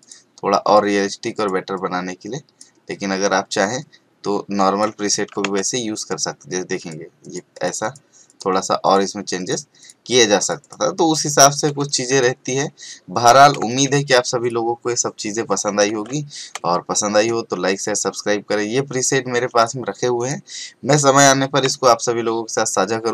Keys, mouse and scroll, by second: 0.0 click, 11.8 space, 11.9 right click, 12.1 click, 12.8 alt+scroll down 1, 13.4 scroll up 1, 13.6 space, 13.7 right click, 14.0 click, 17.8 click.